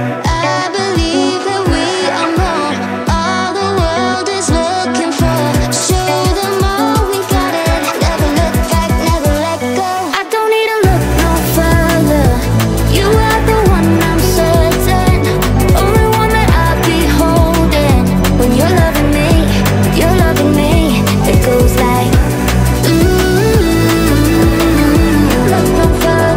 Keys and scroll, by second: 1.8 ctrl+z, 5.4 Up, 7.1 Down.